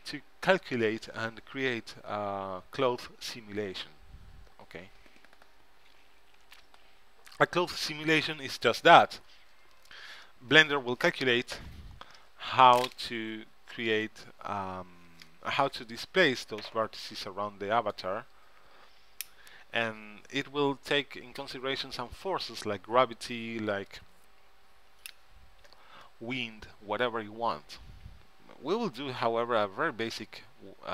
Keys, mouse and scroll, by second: 28.9 ctrl+Up.